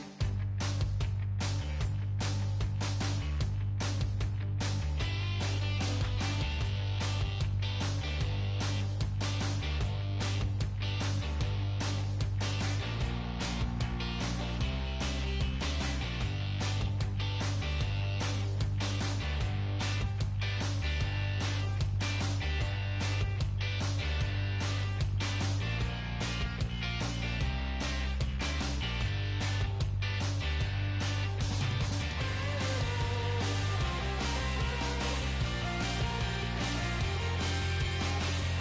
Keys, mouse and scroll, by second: 0.0 g, 1.3-5.4 right drag, 3.4-5.0 middle drag, 4.0 g, 5.7-7.1 right drag, 6.0 g, 7.1-11.0 middle drag, 7.3 right click, 10.0-13.0 right drag, 10.2 g, 11.4 g, 12.3-13.7 middle drag, 13.7-15.5 right drag, 14.5 g, 15.5 middle click, 16.4 middle click, 16.9 right click, 17.1 g, 17.7-28.8 middle drag, 21.9-23.9 right drag, 22.2 g, 23.5 g, 25.4-27.1 right drag, 25.5 g, 27.4-28.8 right drag, 28.8 g, 29.4 right click, 30.4 g, 31.4 g, 31.7-32.9 right drag, 32.3-35.5 middle drag, 33.1-36.5 right drag, 33.9 g, 34.9 g, 38.0-38.6 right drag, 38.5 g.